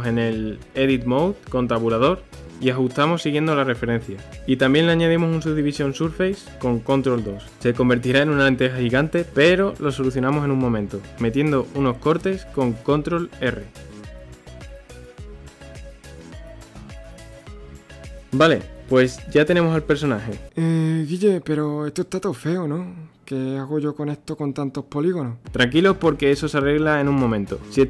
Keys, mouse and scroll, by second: 0.4 g, 1.7 middle click, 1.9 3, 2.1 click, 2.3 click, 3.1 Tab, 3.4 s, 4.4-6.1 middle drag, 8.1 ctrl+2, 9.9 middle click, 10.1 Tab, 10.7-12.9 middle drag, 12.9 ctrl+r, 15.7 scroll, 16.0 ctrl+r, 17.8 scroll, 17.9 middle click, 18.7-19.1 scroll, 19.1 Tab, 21.2 KP_3, 22.8 g, 27.3 scroll, 27.5-27.8 middle drag.